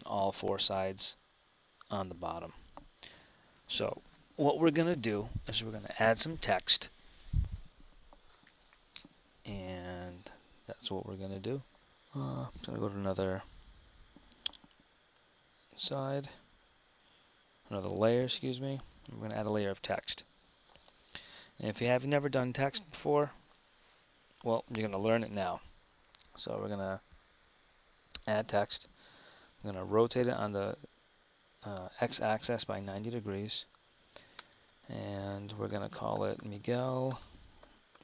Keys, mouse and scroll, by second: 2.9 KP_1, 13.4-15.0 drag, 15.0 shift+s, 19.7 shift+a, 29.8 r, 33.5 Tab, 34.5 BackSpace, 35.6-38.0 typing.